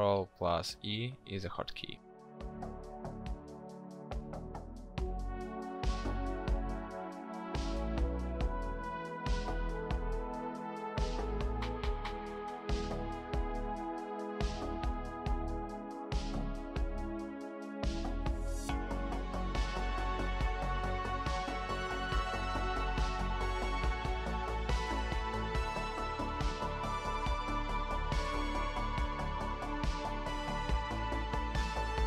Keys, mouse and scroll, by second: 12.6 ctrl+click, 13.7 ctrl+shift+i.